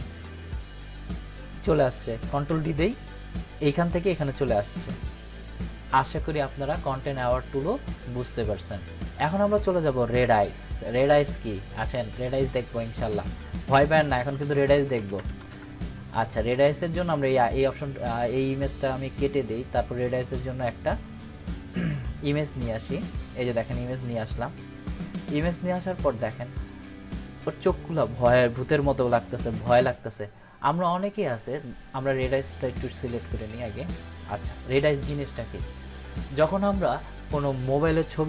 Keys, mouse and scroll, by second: 1.8 click, 2.3 ctrl+d, 6.9-7.9 drag, 11.9 click, 13.9 ctrl+z, 16.8 click, 19.2 click, 21.3 click, 33.0-33.6 click.